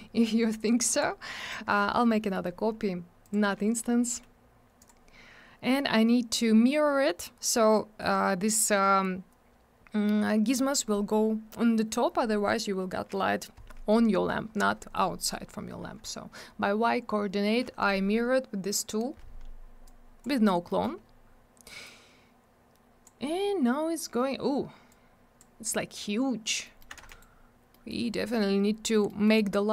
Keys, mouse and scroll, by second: 0.9 click, 1.0 click, 1.4 middle click, 1.5 middle click, 1.7 scroll up 1, 2.3 middle click, 2.4 middle click, 3.2 click, 3.3 click, 4.8 click, 4.9 click, 7.8 scroll up 1, 19.9 click, 20.7 middle click, 20.8 middle click, 21.0 scroll up 1, 21.9 click, 24.9 click, 26.6 middle click, 26.8 middle click, 27.0 alt+w, 27.1 right click, 27.2 double right click, 27.7 middle click, 27.9 middle click, 28.0-28.6 scroll up 1, 29.1 middle click, 29.3 middle click.